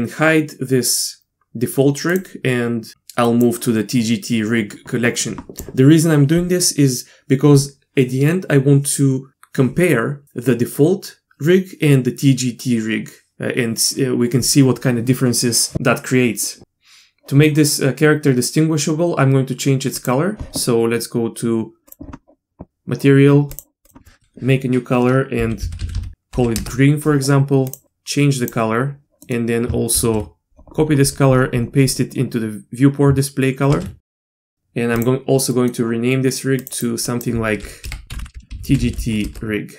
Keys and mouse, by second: 2.1 click, 16.5-17.2 middle drag, 23.5 click, 23.8-27.2 drag, 25.9 e, 29.9 ctrl+c, 33.7 ctrl+v, 34.9-35.5 drag, 35.5-36.2 middle drag, 36.6-39.7 drag, 38.1 Left.